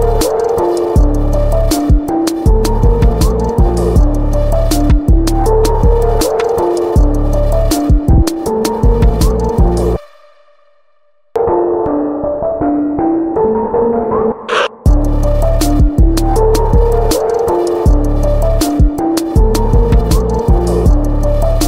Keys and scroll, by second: 1.2-3.6 typing, 3.0 ctrl+alt+BackSpace, 4.3 ctrl+z, 8.8-9.9 typing, 10.0 ctrl+z, 12.9 v, 16.3-17.8 typing, 20.3 ctrl+BackSpace, 20.6 c.